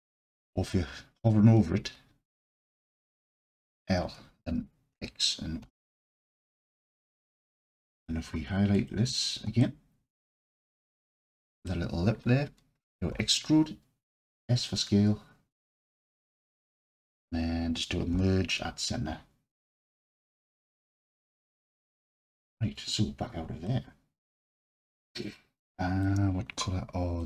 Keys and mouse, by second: 0.1 click, 3.0 l, 4.9 x, 7.4 alt+click, 9.6-11.7 alt+drag, 13.1 e, 14.1 s, 16.0 click, 18.1 m, 22.1 Tab, 23.6-26.1 alt+drag.